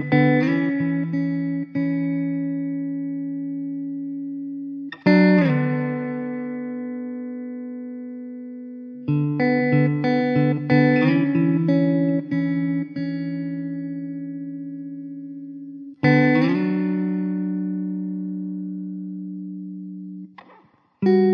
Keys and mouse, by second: 3.4 1, 10.6 alt+w, 11.6 alt+middle click, 13.7 alt+w, 17.9 alt+w, 18.9 2.